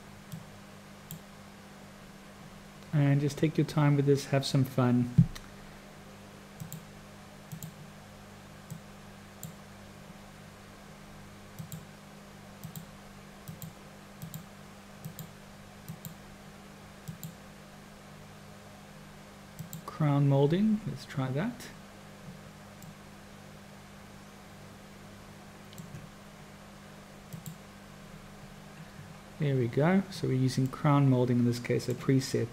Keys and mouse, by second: 0.3 click, 6.5 click, 7.4 click, 8.8 click, 11.6 click, 12.6 click, 13.4 click, 14.1 click, 15.1 click, 15.9 click, 17.1-22.8 drag, 22.8-24.1 middle drag, 24.1-25.1 drag, 25.1 middle click, 27.3 click, 30.7 middle click, 31.4 click.